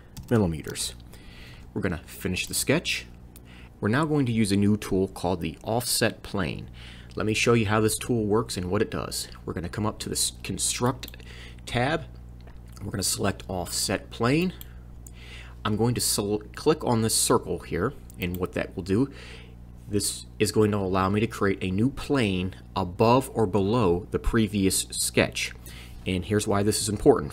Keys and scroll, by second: 0.0-0.7 typing.